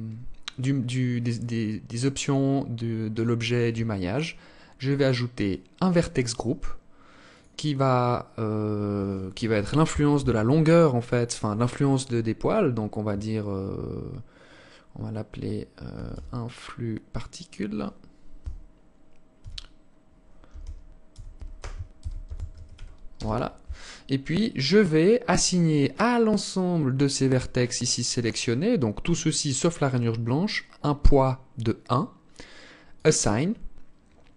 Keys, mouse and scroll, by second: 3.6 scroll down 2, 4.8 click, 32.1 click.